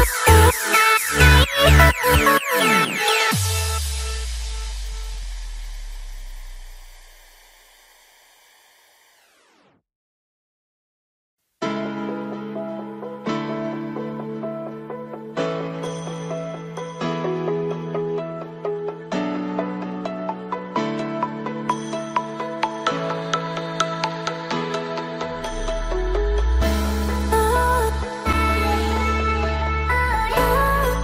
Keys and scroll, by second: 9.2 ctrl+0.